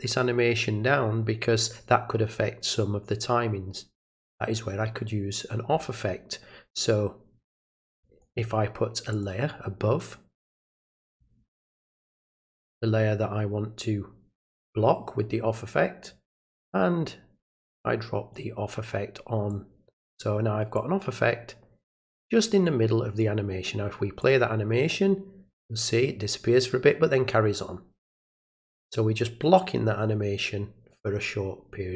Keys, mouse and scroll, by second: 7.9 click, 8.2 right click, 9.1 click, 11.1 click, 16.0-18.3 drag, 19.5 click, 20.7 click, 22.2 click, 24.2 click.